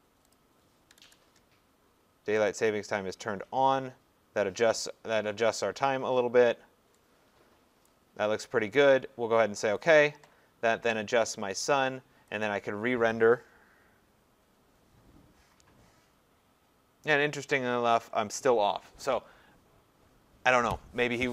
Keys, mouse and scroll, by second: 0.0-1.4 typing, 0.3 click, 2.5 click, 7.9 click, 9.8 click, 12.5 click.